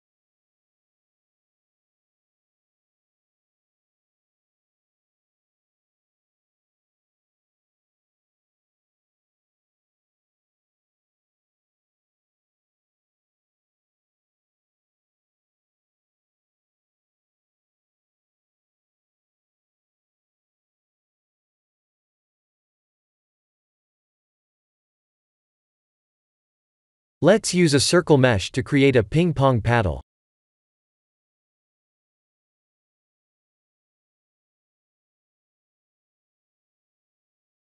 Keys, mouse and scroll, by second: 0.6 click, 1.0 b, 2.7 x, 4.7 Tab, 5.1 shift+z, 5.6-6.0 scroll down 2, 6.0 click, 6.4 middle click, 6.5 middle click, 6.7 middle click, 7.1-7.8 scroll down 7, 7.8 middle click, 8.0 middle click, 9.0 middle click, 9.1 middle click, 9.2 middle click, 9.4 middle click, 10.9 click, 11.4-12.4 scroll up 5, 13.3 ctrl+3, 14.4 ctrl+z, 17.7 click, 18.8 click, 25.4 click, 25.8-26.7 scroll down 3, 26.7 click, 28.1-29.7 scroll down 2, 28.6 click, 30.0 click, 30.6 shift+a.